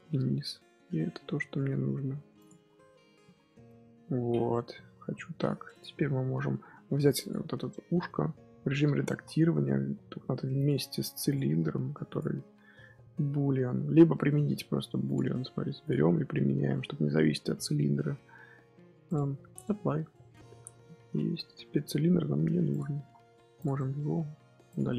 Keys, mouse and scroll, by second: 2.6 scroll down 1, 2.7 middle click, 3.0 Tab, 3.1 z, 3.6-4.5 middle drag, 4.5 KP_3, 4.9 KP_1, 5.2-5.6 scroll down 1, 5.6 click, 5.9-6.6 scroll up 5, 7.1 click, 8.0 Tab, 8.8 a, 9.0 z, 9.5 Tab, 10.5 click, 11.2 click, 12.0 ctrl+click, 13.4 Tab, 14.4 Tab, 15.0 click, 15.7 click, 19.0-22.0 drag, 22.6 click, 22.9 z, 23.5 click, 23.7-24.2 middle drag, 24.2 z, 24.5 x, 24.8-24.9 middle drag.